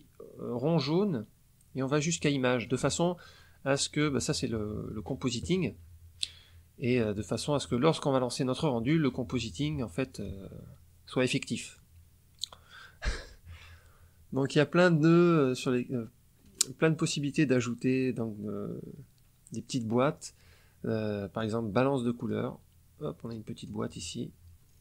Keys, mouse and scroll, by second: 0.8-2.8 drag, 3.3 click, 16.4 click, 22.1 click, 23.5 click, 24.6-24.8 scroll down 1.